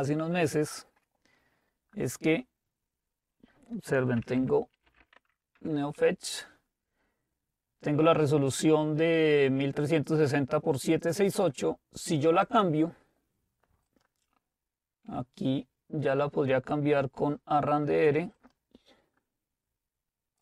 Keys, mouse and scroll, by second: 4.0-5.5 typing, 5.6 Return, 10.0-12.7 drag, 12.4-13.8 right drag, 13.8-15.1 drag, 18.8 click.